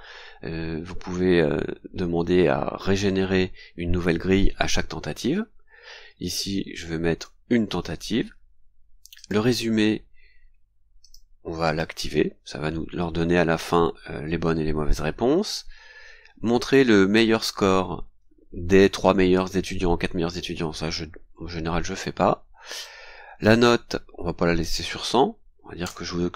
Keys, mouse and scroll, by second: 7.1 KP_1, 9.1 click, 11.0 click, 11.6 click, 15.6-15.9 scroll down 2, 22.7 click, 23.4 scroll down 2, 24.6 click, 25.8 BackSpace.